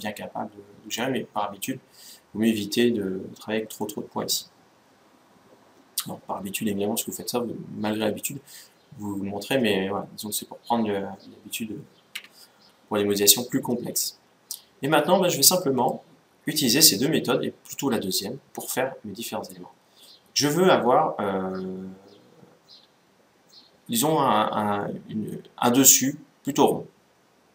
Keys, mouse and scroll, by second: 1.5 middle click, 3.5-5.4 middle drag, 13.3-14.9 middle drag, 15.1 middle click, 19.2-21.0 middle drag.